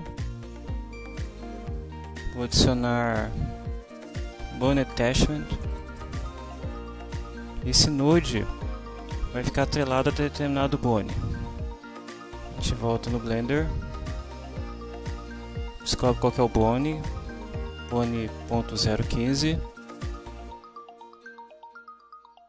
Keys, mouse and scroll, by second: 1.2 click, 2.8-3.8 typing, 5.7 click, 7.7 click, 12.6 alt+Tab, 16.7 right click, 19.9 alt+Tab.